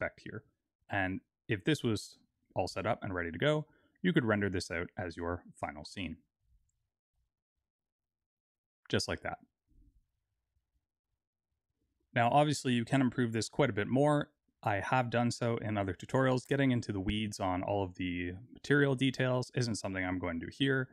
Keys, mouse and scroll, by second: 6.1 alt+a, 11.6 click.